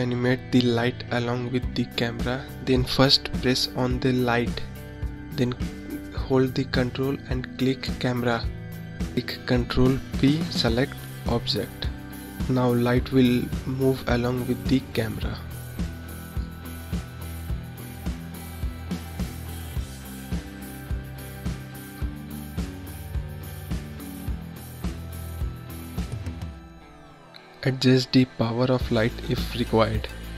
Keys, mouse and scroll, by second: 4.5 ctrl+click, 8.0 ctrl+p, 12.0-16.2 drag, 19.1-22.0 drag, 25.1 click, 26.9-30.1 drag.